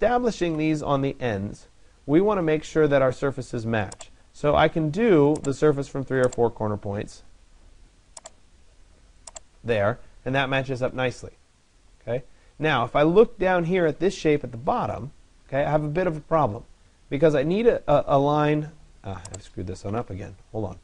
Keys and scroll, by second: 0.1 Delete, 19.5 Delete.